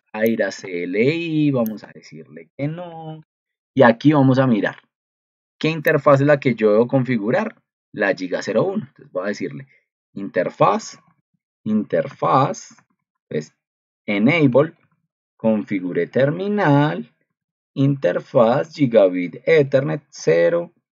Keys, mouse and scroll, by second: 6.2 ctrl+2.